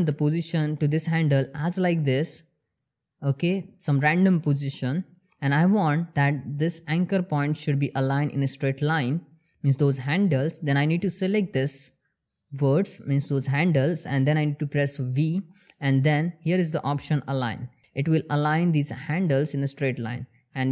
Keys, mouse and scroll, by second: 1.1 click, 2.1 g, 3.2 click, 10.4-11.7 drag, 14.7 v, 16.8 click.